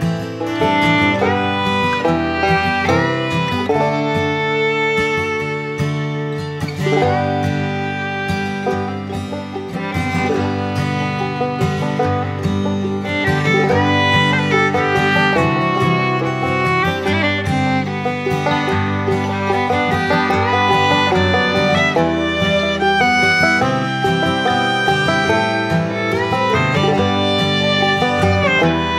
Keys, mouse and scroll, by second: 2.1-4.0 shift+drag, 4.6 ctrl+alt+z, 4.9-7.1 alt+drag, 7.1-12.3 drag, 13.9-17.4 drag, 17.4-20.3 drag, 22.7-24.2 drag, 27.2 click.